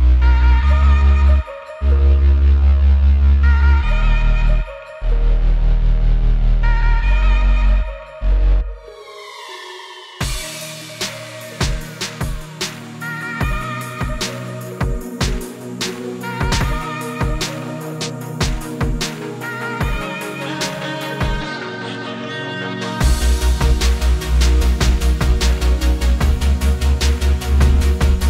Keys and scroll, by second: 15.9 super+z.